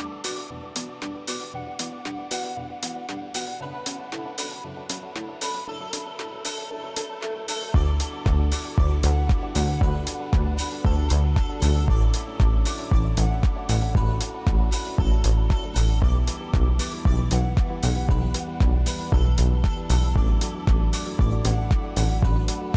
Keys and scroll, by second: 7.8 Escape, 12.4 space, 18.7 Escape, 20.6 space, 21.6 ctrl+shift+].